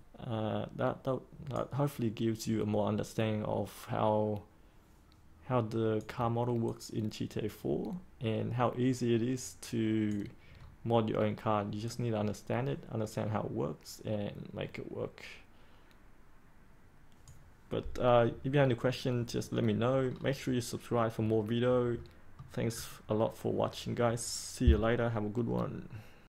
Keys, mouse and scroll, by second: 10.5-11.8 scroll up 1, 11.8-17.2 drag, 20.0-21.9 scroll down 1, 21.9 middle click, 22.6-26.3 scroll up 1.